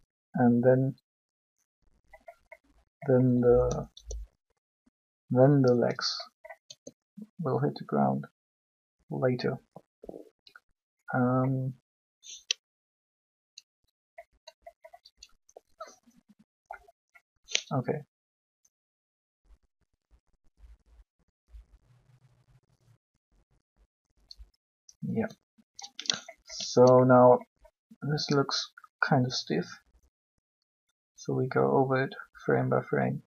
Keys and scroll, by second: 3.9 b, 6.6 g.